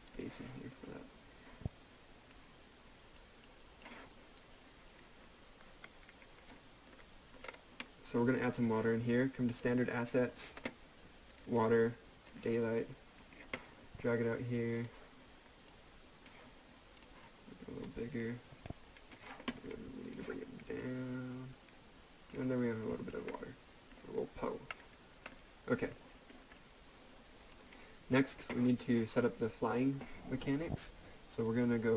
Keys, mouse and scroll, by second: 6.9 middle click, 7.4 scroll up 1, 7.8 middle click, 9.5-22.4 drag, 22.8 right click, 23.3 middle click, 24.7 right click, 25.3 middle click, 26.3-26.6 scroll down 1, 26.6 right click.